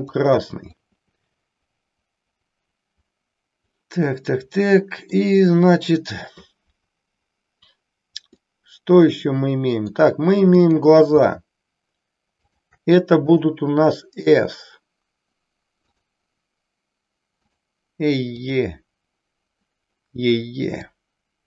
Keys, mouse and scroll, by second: 0.7-5.1 middle drag, 8.4-9.9 middle drag, 10.6-11.9 drag, 12.3-13.9 shift+drag, 15.8-17.7 drag, 18.3 click, 20.8-21.4 drag.